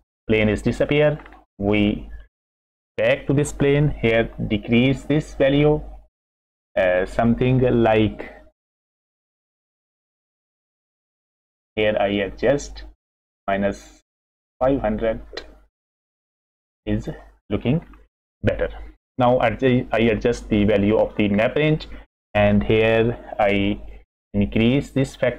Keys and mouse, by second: 0.9 middle click, 1.9 middle click, 4.2-9.2 shift+drag, 9.2-13.5 shift+middle drag, 13.9-17.1 shift+middle drag, 17.9-18.4 middle drag, 20.3 middle click, 21.9 middle click, 23.9-25.3 drag.